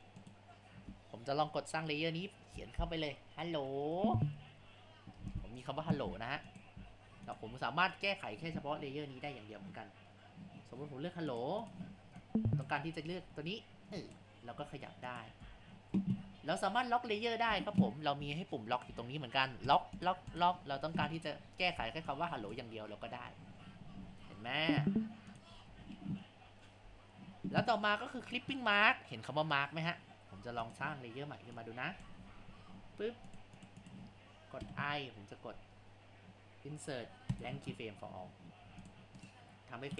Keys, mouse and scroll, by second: 0.2 click, 1.6 click, 2.4 click, 3.3-5.2 drag, 6.2 Tab, 7.0 Tab, 7.6 a, 11.3 click, 11.6 click, 12.2 click, 13.2 g, 14.5 g, 15.4 ctrl+z, 16.1 ctrl+z, 18.7 click, 19.7 click, 20.0 click, 20.3 click, 20.8 a, 21.2 click, 22.1 Left, 23.0 g, 25.7 ctrl+z, 30.3 Tab, 31.6-33.4 drag, 33.6 click, 33.8 click, 34.6 |, 38.6 Tab, 39.2 click, 39.9 Delete.